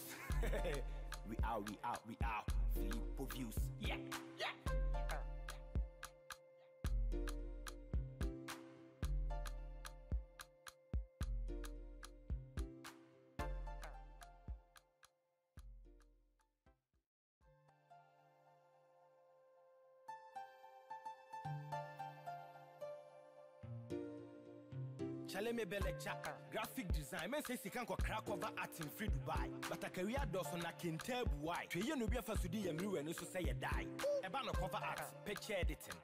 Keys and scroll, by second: 4.9 ctrl+g, 16.8 ctrl+-.